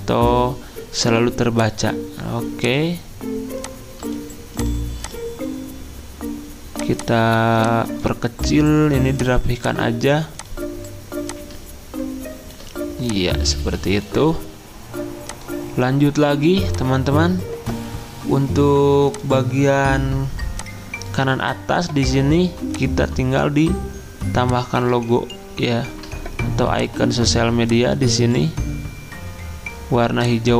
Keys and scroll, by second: 16.3 z.